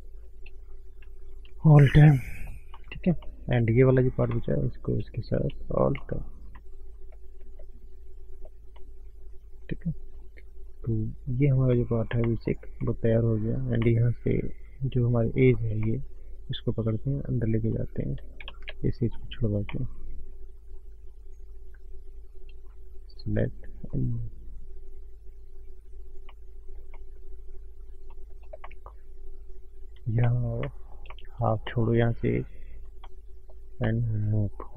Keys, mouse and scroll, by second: 0.2 shift+click, 0.4 shift+click, 1.5 alt+m, 1.9 scroll down 2, 2.1 middle click, 2.7 middle click, 3.3 shift+middle click, 4.1 click, 4.7 shift+click, 6.0 alt+m, 6.9 scroll down 2, 7.1 middle click, 7.3-7.7 scroll up 1, 7.9-8.5 scroll down 3, 8.5 click, 8.7 middle click, 9.7 scroll down 1, 10.4 scroll down 1, 10.6 middle click, 11.3-11.8 scroll up 3, 11.7 middle click, 12.2 shift+middle click, 12.5 click, 12.8 middle click, 13.4 scroll up 1, 13.8 middle click, 15.2 alt+click, 15.9 middle click, 16.6 click, 17.6-18.1 scroll up 2, 17.7 middle click, 17.9 alt+click, 18.4 ctrl+z, 21.1 click, 22.9 shift+click, 23.5 click, 26.2-26.6 scroll down 4, 26.6 middle click, 26.9 middle click, 28.0 shift+middle click, 28.5 scroll up 1, 28.6 middle click, 29.4-29.9 scroll up 1, 30.2 shift+middle click, 31.2 middle click, 31.9 ctrl+shift+right click, 33.3 middle click, 33.7 middle click, 34.2 middle click.